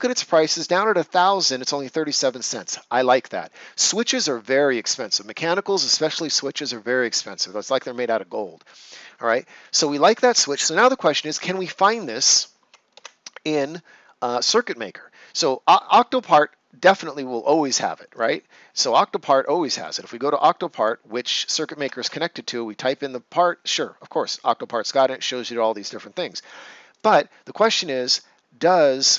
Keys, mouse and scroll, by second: 11.7 click, 15.3 click, 18.1 click, 21.9 Return, 26.9 click.